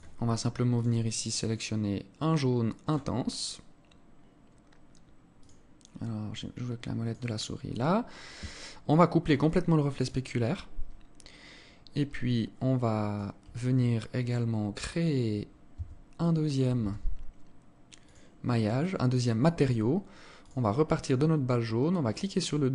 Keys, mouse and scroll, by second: 0.4 click, 5.0 click, 7.5-7.9 scroll down 3, 9.0 click, 10.7 scroll down 1, 11.8 alt+click, 11.8 scroll up 3, 14.4-15.4 scroll up 7, 15.4 Tab, 16.4 a, 17.6 click, 20.0 click.